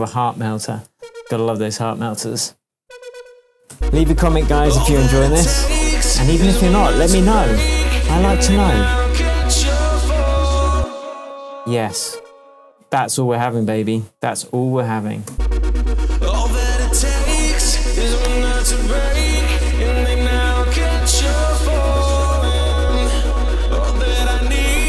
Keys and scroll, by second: 3.7 alt+space, 4.6 space, 10.7 space, 15.3 space.